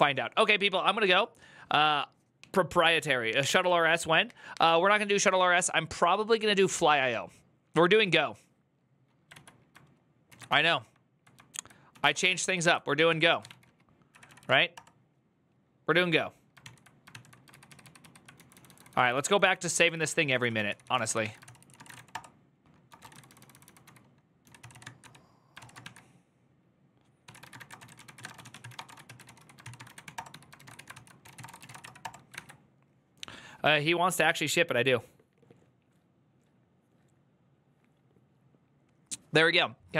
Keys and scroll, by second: 9.2 alt+{, 10.0 ctrl+a, 10.3 1, 10.4 ctrl+c, 11.4-13.7 typing, 13.9 Up, 14.1 Up, 14.1 Up, 14.3 Up, 14.5 Return, 16.4 ctrl+t, 16.9 ctrl+n, 17.3 ctrl+u, 17.8 ctrl+u, 18.1-32.6 typing.